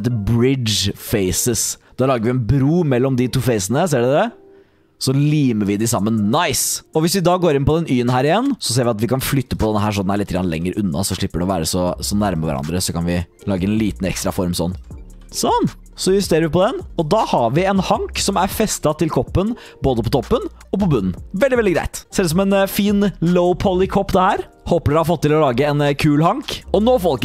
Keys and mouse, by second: 6.3 click, 7.6 click, 8.6 2, 9.4 alt+click, 10.0 shift+click, 10.5 g, 11.6 r, 12.4 s, 13.3 g, 13.6 s, 15.1 g, 15.9 r, 16.5 s, 17.0 g, 17.9 click, 18.1 middle click, 18.8 middle click, 20.2 middle click, 21.2 middle click, 22.0 Tab, 22.1-22.9 drag, 24.3 middle drag, 24.9 middle drag, 25.4 middle click, 26.2 middle click.